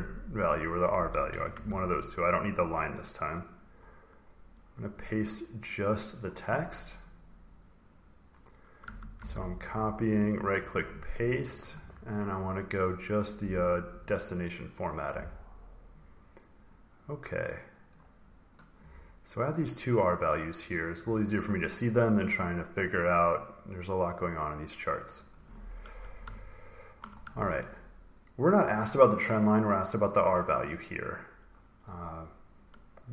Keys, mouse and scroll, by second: 0.7 click, 1.4 ctrl+c, 2.3 click, 3.8 right click, 4.8 click, 5.9 click, 7.1 click, 7.3 click, 8.5 click, 9.1 ctrl+c, 9.6 click, 10.1 right click, 14.5 click, 17.6 click, 18.1 click, 19.4 click, 22.1 click, 23.0 click, 24.2 click, 25.1 click, 26.4 ctrl+scroll, 29.0 ctrl+scroll, 29.9 click, 30.7 click, 32.4 click.